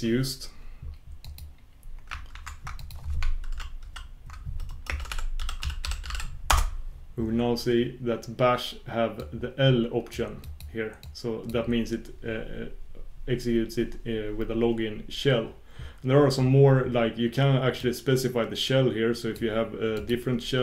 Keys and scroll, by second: 2.4 shift+super+q, 6.6 shift+super+q.